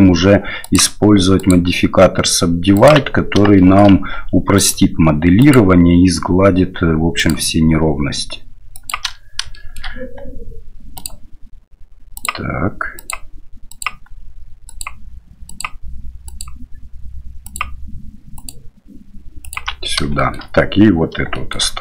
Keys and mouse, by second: 3.6 shift+middle click, 5.4 ctrl+click, 7.2-8.9 ctrl+drag, 9.5 shift+middle click, 11.0 ctrl+click, 13.0 ctrl+click, 13.7 ctrl+click, 14.7 ctrl+click, 15.5 ctrl+click, 16.4-17.5 ctrl+drag, 18.3 ctrl+click, 19.4 ctrl+click, 20.2 shift+middle click, 21.3 shift+middle click.